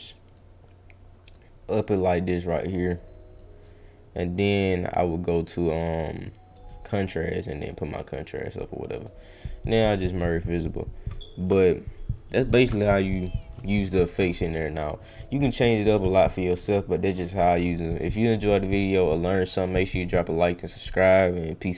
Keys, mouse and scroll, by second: 0.9 click, 1.8 click, 3.3 click, 4.6 click, 6.5 click, 7.4 click, 8.1 click, 9.0 click, 9.7 right click, 11.0 click, 11.5 shift+right click, 11.8 shift+click, 12.6 shift+right click, 14.2-16.0 shift+drag, 16.3-17.4 drag.